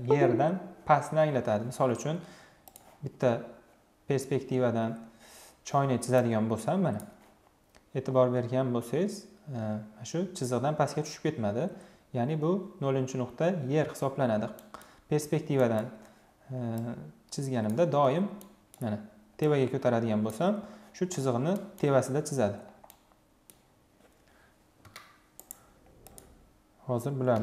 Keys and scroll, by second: 24.7 Delete, 27.0 Delete.